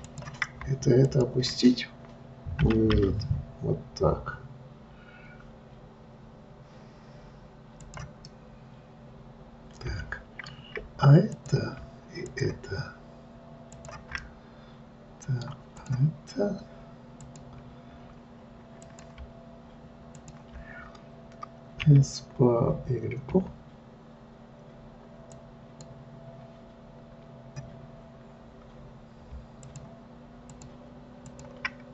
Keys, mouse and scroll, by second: 1.3 shift+click, 3.0 g, 8.6-11.6 middle drag, 11.6 click, 12.6 shift+click, 14.1 shift+click, 14.5-16.1 middle drag, 16.1 click, 17.6 click, 19.2 click, 20.5 shift+click, 22.2 s, 29.9 shift+click, 30.7 shift+click, 31.6 shift+click.